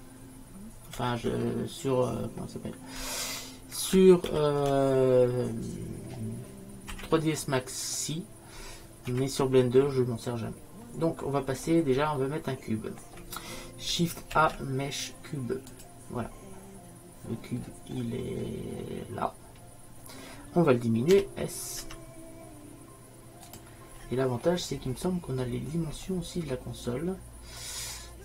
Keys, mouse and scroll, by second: 1.0 ctrl+a, 10.9-12.8 middle drag, 19.6-21.2 middle drag, 21.2 s, 21.9 s, 28.1 middle click.